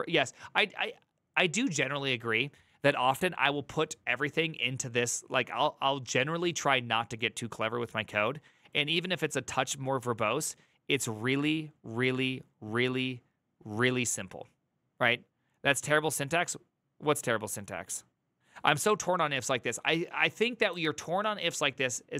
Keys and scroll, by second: 20.5 alt+[.